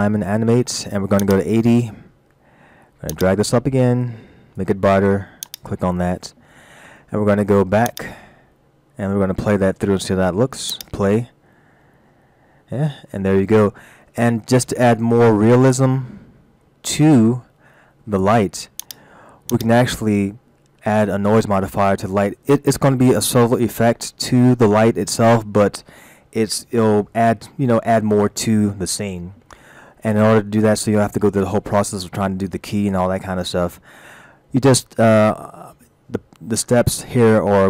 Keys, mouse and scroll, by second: 1.3 click, 3.1 click, 5.4 click, 7.9 click, 10.7 click, 18.8 click, 19.5 click, 35.7 middle click.